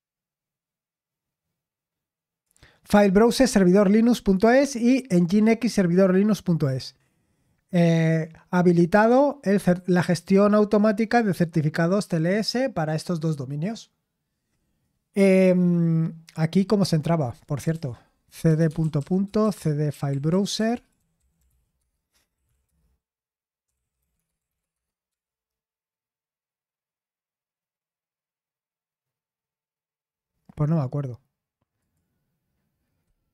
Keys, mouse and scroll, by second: 17.2 click, 17.7 ctrl+c, 18.2-25.1 typing, 31.8 click.